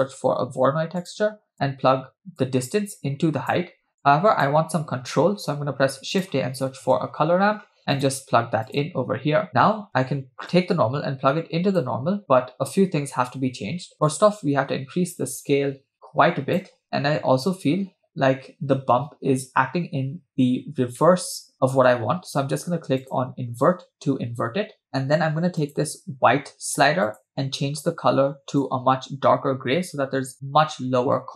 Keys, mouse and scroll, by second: 2.4-3.6 drag, 4.2 click, 5.4 shift+a, 10.5-12.1 drag, 14.1-16.8 drag, 16.8-17.2 scroll down 2, 17.4-17.9 scroll up 3, 19.7-20.2 scroll down 3, 21.1 shift+middle click, 23.3 click, 24.9-25.5 scroll down 3, 25.6 click, 27.3 click.